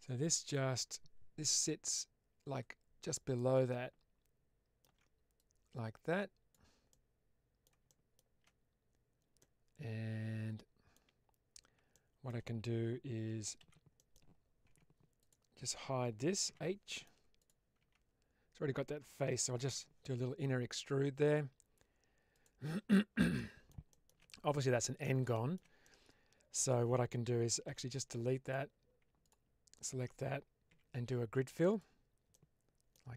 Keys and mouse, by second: 1.8-3.0 drag, 3.2-4.8 alt+middle drag, 5.3-6.4 drag, 6.8 middle click, 7.8 shift+middle click, 9.3-10.8 middle drag, 11.9 shift+middle click, 13.5 alt+z, 13.8 middle click, 14.6 Tab, 15.1 click, 16.4 h, 16.7 middle click, 17.3 click, 17.7 Tab, 19.6 i, 22.2 click, 23.2 middle click, 23.8 shift+middle click, 24.1 middle click, 25.2 shift+middle click, 25.7 middle click, 27.5 x, 29.2 alt+click, 30.6 q, 32.2 middle click.